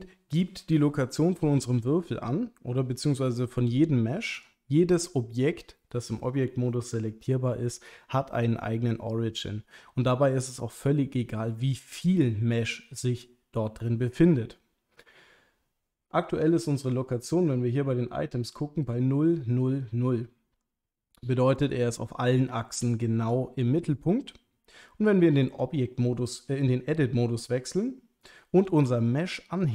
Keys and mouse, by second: 4.4 click, 17.3 click, 21.6-23.6 middle drag, 25.4 Tab, 28.6 g, 28.8 z.